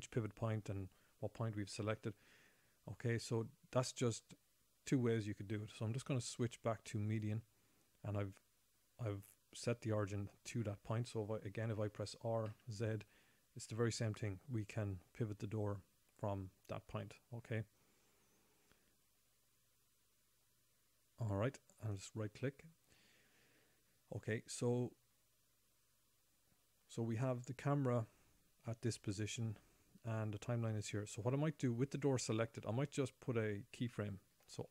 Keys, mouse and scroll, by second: 6.4 ., 7.5 ., 12.2 r, 12.3 r, 23.3-25.4 scroll down 11, 26.1-26.9 scroll up 1, 31.9-34.7 scroll up 5.